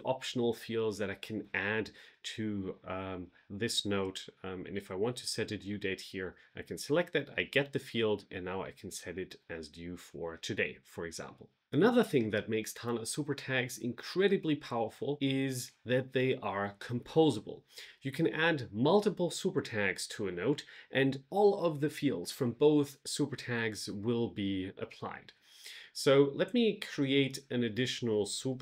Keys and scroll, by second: 28.5 Return.